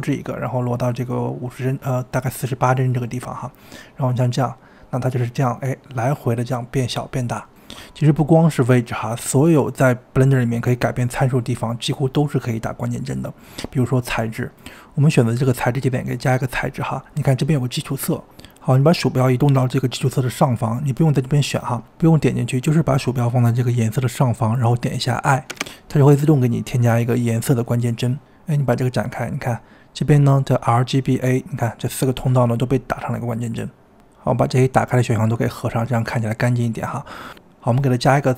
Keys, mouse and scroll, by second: 3.5-4.7 drag, 4.7 space, 6.8 space, 12.1-14.4 drag, 14.5 click, 15.4-18.4 drag, 19.0 click, 28.6 click, 29.9 click, 31.8 click, 32.5 click, 34.8 click, 37.0 click.